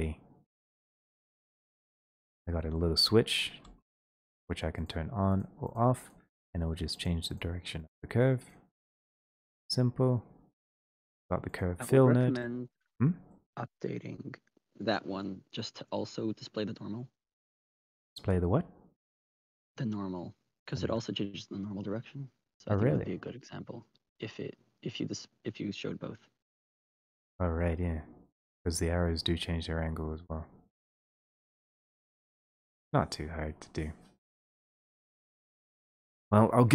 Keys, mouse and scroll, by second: 2.2 click, 2.8 click, 4.9 click, 5.5 middle click, 5.5 click, 5.7 click, 6.1 click, 6.4 click, 7.1 click, 7.4 click, 7.9 click, 8.6 click, 9.0 click, 10.9 click, 11.5 click, 12.9 middle click, 13.2-14.1 scroll, 14.1 click, 14.4 middle click, 16.4 click, 21.3-26.0 drag, 26.1-26.8 scroll, 26.8 middle click, 27.7-28.3 scroll, 30.4 middle click, 30.4 right click, 31.3 click, 32.7-34.1 scroll, 34.7 click, 36.2 scroll.